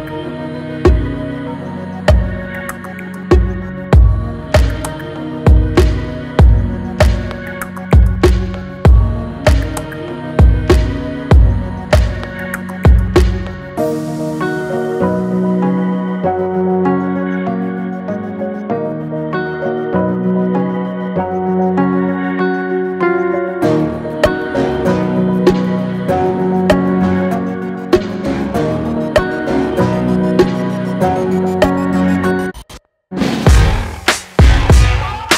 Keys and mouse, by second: 3.8 click, 5.0 click, 8.0-18.5 drag, 25.9-28.4 drag.